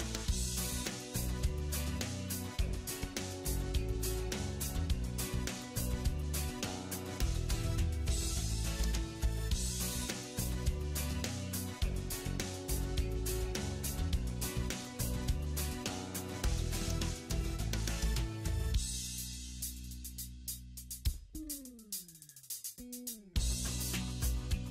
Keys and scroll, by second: 1.7 alt+w, 21.6 alt+w.